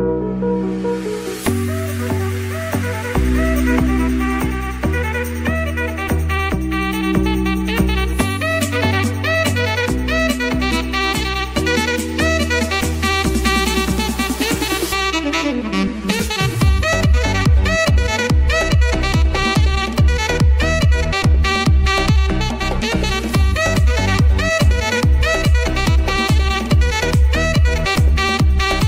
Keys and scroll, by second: 8.0 ctrl+e, 10.0 ctrl+z, 11.7 [, 14.0 space, 14.4 ctrl+z, 14.7 [, 16.1 space, 20.9 ctrl+s, 24.5 Return.